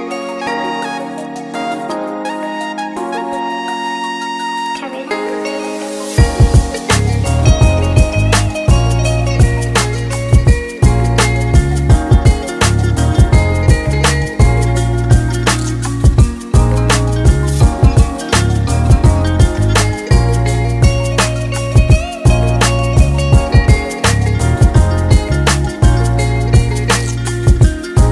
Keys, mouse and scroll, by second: 0.9 alt+shift+click, 1.4 alt+shift+click, 2.3 s, 4.7 middle click, 5.1 scroll down 3, 6.0 shift+middle click, 6.6 middle click, 6.8 middle click, 7.3-8.0 scroll up 3, 8.0 click, 8.7 KP_1, 9.2-9.5 scroll down 2, 9.8 click, 11.6 KP_7, 12.0-12.9 scroll up 2, 12.9 click, 13.7 r, 18.4 middle click, 19.4 Tab, 19.7 scroll down 3, 19.9 middle click, 20.9 click, 23.7 click, 24.6 right click, 25.6-26.0 scroll down 1, 26.0 KP_1, 26.4 scroll up 1, 27.4 s.